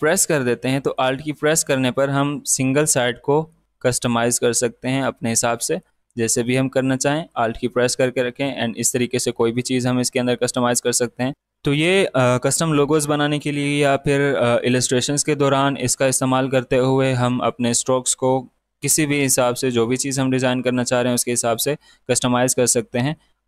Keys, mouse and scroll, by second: 0.3-6.5 drag, 6.5-10.7 alt+drag, 22.9 alt+Num_Lock, 23.1-23.4 alt+drag.